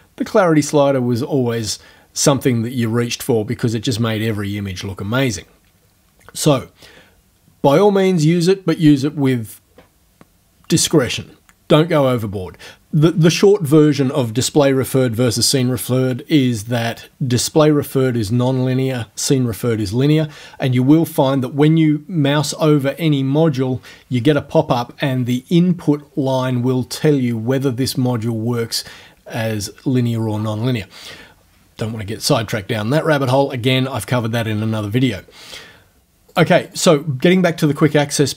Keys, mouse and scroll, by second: 36.4 click, 36.7 click.